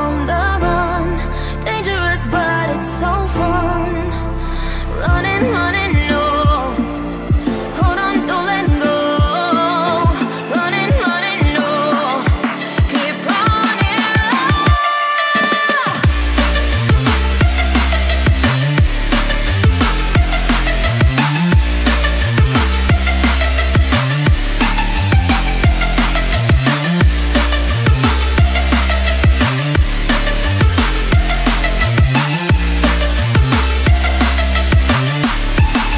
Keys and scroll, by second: 25.0 ctrl+t, 27.0 Return.